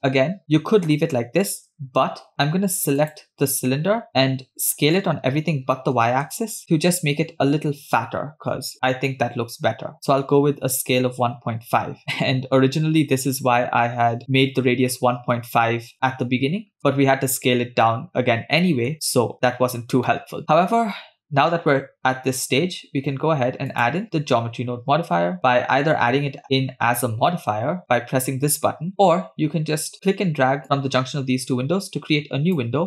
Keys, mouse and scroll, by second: 0.4 middle click, 3.7 click, 5.0 s, 17.8-19.3 middle drag, 20.7 middle click, 23.8-28.9 drag, 30.9-32.8 drag.